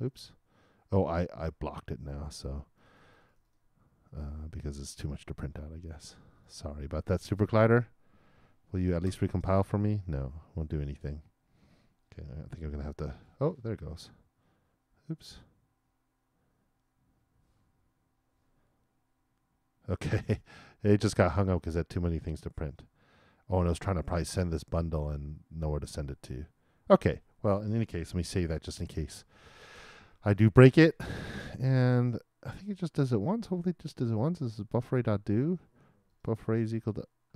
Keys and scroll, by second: 9.0 shift+super+l, 28.2 super+s.